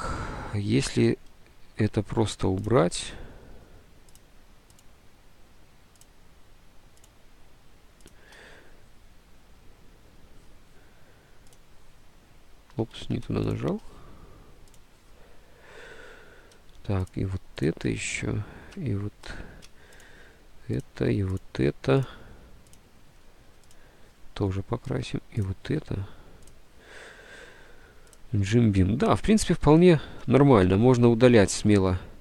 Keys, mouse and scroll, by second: 0.9 ctrl+z, 12.9 ctrl+z, 29.9 ctrl+z, 30.8 Delete, 30.8 ctrl+z.